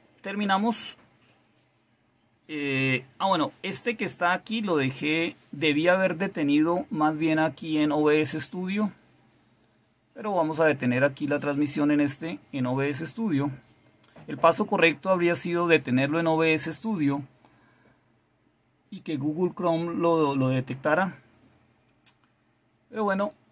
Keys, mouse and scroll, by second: 10.6 click, 23.1 click.